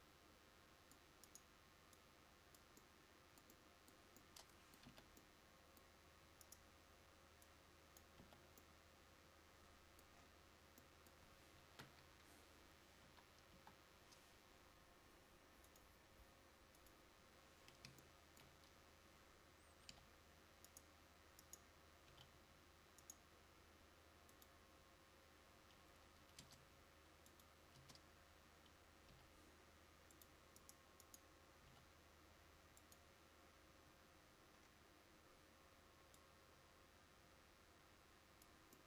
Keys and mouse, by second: 5.0 z, 8.3 z, 12.0 KP_5, 13.1 KP_1, 13.6 KP_5, 22.2 g, 26.5 Tab, 27.9 Tab, 29.2 g, 31.8 g.